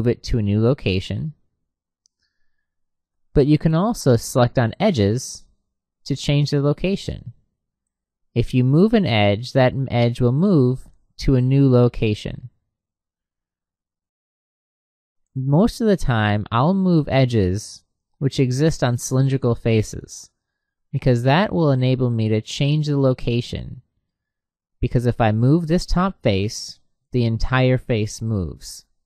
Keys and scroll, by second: 2.6 Escape, 28.2 Escape.